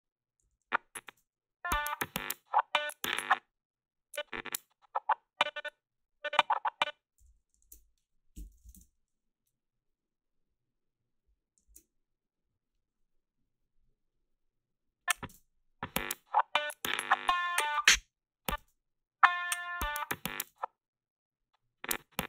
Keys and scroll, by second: 0.5 a, 1.0 space, 3.1 space, 7.2-9.1 typing, 7.7 alt+shift+s, 15.3 space, 17.7 space, 18.5 space, 20.5 space.